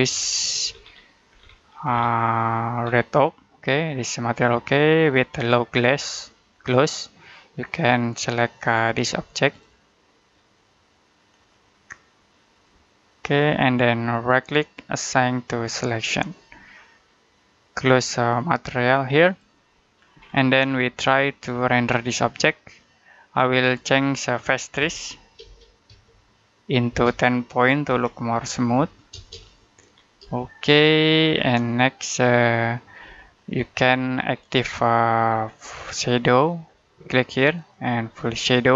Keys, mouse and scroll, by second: 1.5 scroll up 1, 1.7-2.7 scroll down 1, 2.7-3.3 scroll up 1, 7.8 click, 14.0 click, 14.1 right click, 15.6 click, 19.1 click, 20.1-20.6 scroll up 1, 20.6 middle click, 21.0 shift+middle click, 24.0 middle click, 24.4-29.0 typing, 29.8 scroll down 1, 30.2 shift+middle click, 33.0 middle click, 33.4-33.8 scroll up 1, 33.8-34.2 scroll down 1, 34.2-34.7 scroll up 1, 34.7 middle click, 35.1 scroll down 1, 35.4-35.8 scroll up 1, 35.8 middle click, 37.4 click.